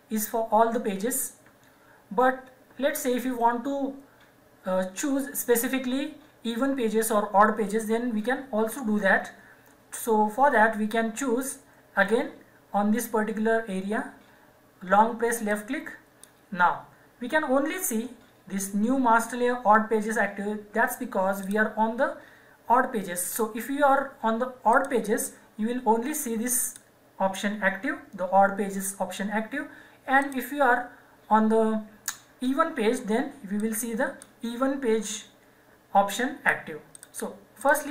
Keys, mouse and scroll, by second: 15.5 click, 21.4 click, 24.7 click, 30.2 click, 33.5 click, 36.9 click.